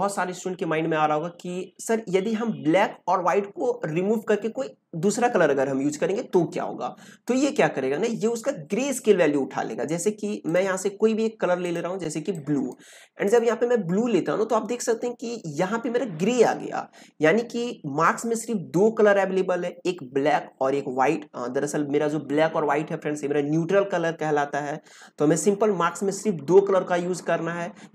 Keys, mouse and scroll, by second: 10.4 click.